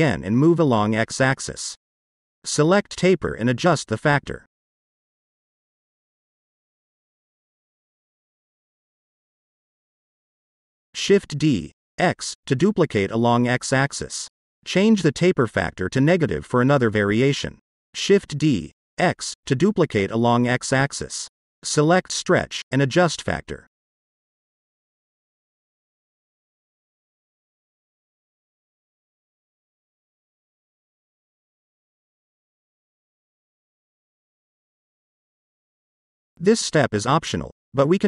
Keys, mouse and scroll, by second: 0.9 click, 1.6-3.1 middle drag, 3.1 click, 3.9 click, 4.7 click, 5.1 click, 5.3 click, 5.8 click, 6.0 click, 7.0-8.7 drag, 8.9 scroll up 1, 9.0-9.6 middle drag, 9.9 shift+middle click, 10.6-11.1 shift+scroll up 1, 11.5 shift+d, 11.7 x, 12.6 click, 13.6-16.1 drag, 16.4 scroll down 1, 16.7-17.2 middle drag, 18.2 shift+d, 18.4 x, 19.6 click, 20.0-20.5 shift+middle drag, 20.8-21.1 scroll up 1, 24.3 click, 25.4-30.0 drag, 32.2-33.8 middle drag, 34.9-35.6 drag, 35.9-36.7 scroll down 2, 36.2-36.7 shift+middle drag.